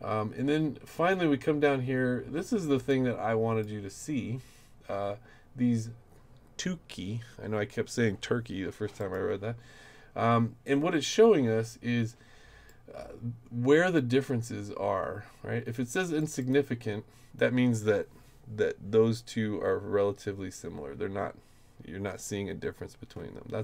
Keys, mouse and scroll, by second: 0.5 middle click, 2.9 click, 9.0 click, 12.7-13.9 drag, 16.2 click, 16.4 click.